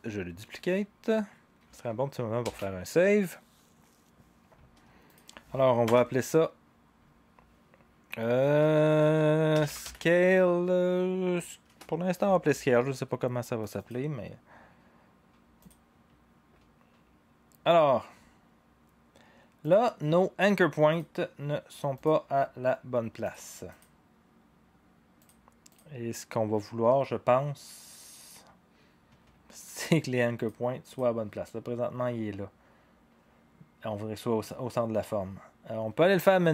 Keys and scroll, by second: 2.4 ctrl+s, 5.8 Return, 8.4-10.3 typing, 11.6 Return, 13.7-14.5 typing.